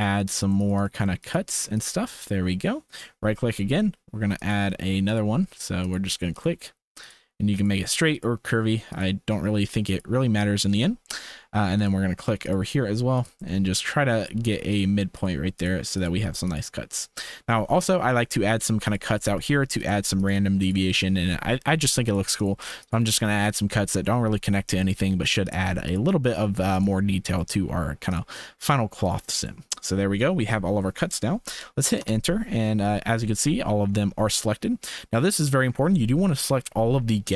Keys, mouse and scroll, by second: 32.6-35.1 drag.